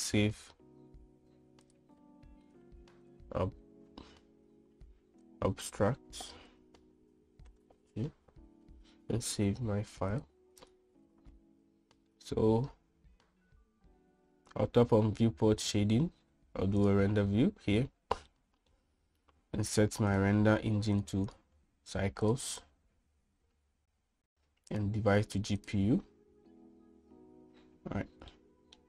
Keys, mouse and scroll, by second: 19.0 middle click, 20.8 click, 22.0-24.3 drag, 26.3-27.4 drag.